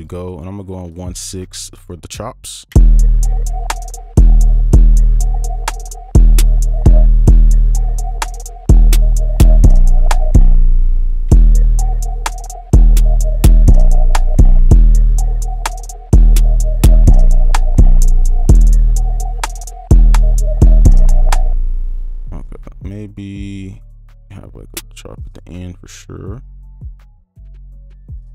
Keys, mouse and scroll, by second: 4.5 space, 9.8 ctrl+click, 10.3 right click, 10.8 ctrl+click, 11.0 alt+scroll down 7, 11.3 space, 12.3 ctrl+click, 12.6 alt+scroll up 1, 13.6 right click, 13.8 ctrl+click, 14.1 alt+scroll up 2, 14.4 space, 15.1 right click, 15.7 ctrl+click, 18.4 right click, 22.5-25.1 scroll up 1, 26.0 alt+click, 27.7 ctrl+alt+click.